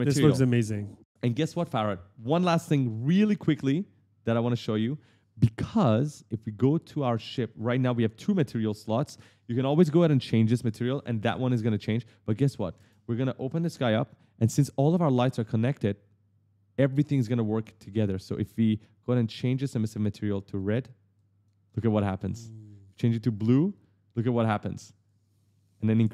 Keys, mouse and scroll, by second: 1.1 click, 1.7 right click, 4.2 click, 6.8 click, 7.5-7.8 scroll down 1, 11.5 ctrl+space, 12.6 ctrl+space, 13.4 click, 13.5 click, 15.4 click, 16.7 click, 19.0 click, 19.6 click, 20.3 click, 21.6-22.4 typing, 21.8 right click, 22.7 click, 24.2 click, 24.9 click.